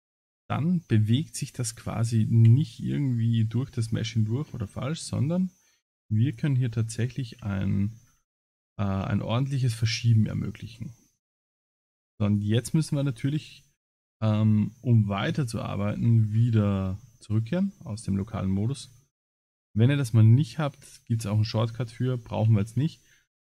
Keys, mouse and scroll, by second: 4.5 s, 6.7 middle click, 7.6-8.1 scroll down 11, 8.4-8.9 scroll up 7, 9.1 Tab, 9.5 middle click, 9.9 Tab, 10.2 middle click, 11.0 middle click, 11.4-12.1 scroll down 10, 13.7 middle click, 16.0-17.3 scroll down 18, 17.1 middle click, 18.9 scroll up 5, 19.4-19.8 scroll down 2, 20.0-20.5 scroll up 1, 22.5 ctrl+s.